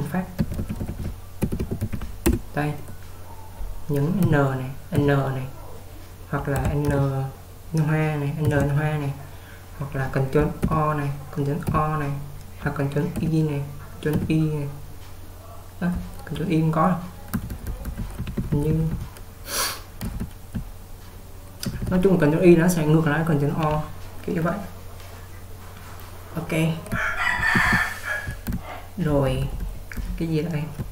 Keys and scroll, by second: 0.2-2.4 typing, 4.3-5.5 typing, 6.9 typing, 8.5 typing, 10.7 ctrl+o, 11.7 ctrl+o, 13.2 ctrl+i, 14.2 ctrl+i, 17.2-20.4 typing, 21.7 typing, 27.2-28.2 typing.